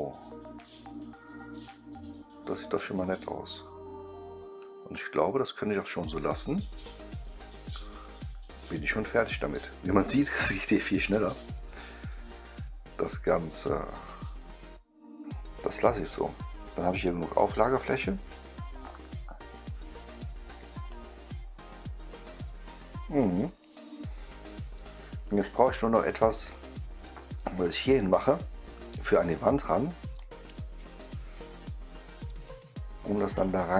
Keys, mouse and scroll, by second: 15.1 right click, 18.5-24.7 right drag, 28.2-29.3 right drag, 30.1-30.9 right drag, 31.4-32.2 scroll down 1, 32.2-33.7 right drag.